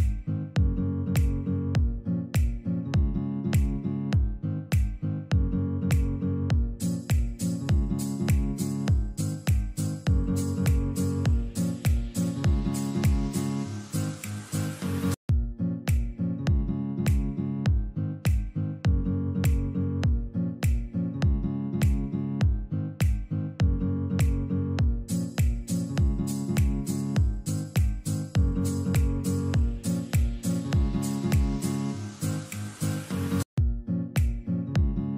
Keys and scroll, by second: 4.7 space, 13.2 ctrl+g, 13.9 e, 14.2 Escape, 21.9 ctrl+r, 23.8 ctrl+r, 27.3 ctrl+r, 29.5 ctrl+Page_Down, 31.3 alt+v, 32.4 Escape.